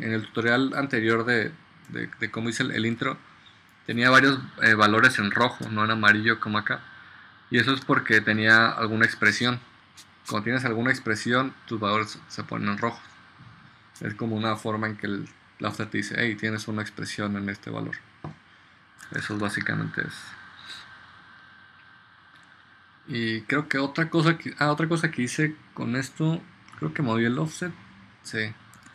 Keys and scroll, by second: 2.2 space.